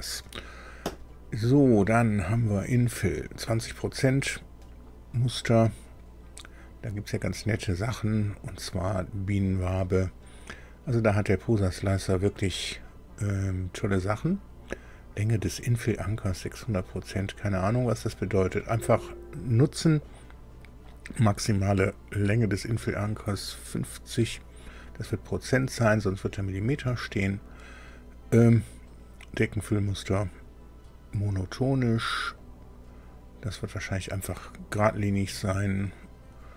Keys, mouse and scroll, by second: 2.2 click, 6.4 click, 9.4 click, 32.4 click, 35.8 click.